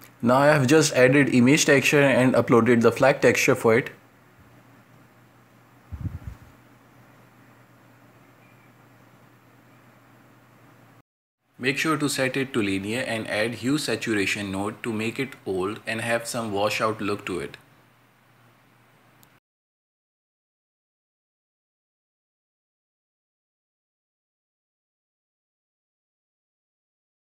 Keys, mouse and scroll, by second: 0.0-0.6 drag, 1.3-2.1 middle drag, 2.1 click, 4.5 shift+a, 10.0-12.0 shift+drag, 12.0-12.5 middle drag, 12.5 scroll down 2, 12.6-13.1 shift+middle drag, 13.1 a, 13.1 a, 13.4 ctrl+space, 13.6 shift+`, 14.5 space, 16.0 right click, 16.4 ctrl+m, 17.7 middle click, 18.5 scroll up 2, 18.6 space, 19.6 shift+click, 20.3 space, 21.0-23.9 shift+drag, 23.9 space, 24.1 scroll down 2, 24.2 middle click, 25.8 ctrl+space, 26.3 a, 26.4 a.